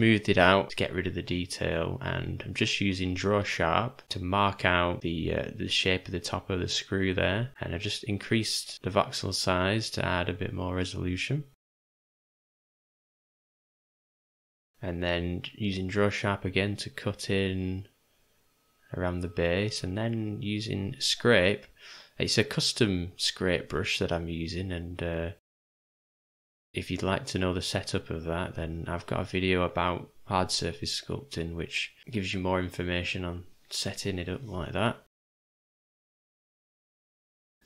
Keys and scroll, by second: 0.2 j, 5.3 v, 12.7 ], 12.8 ], 12.8 ], 16.2 3, 16.8 [, 16.9 [, 17.2 [, 31.3 ctrl+z, 34.0 j, 35.4 [, 35.6 [, 36.0 [.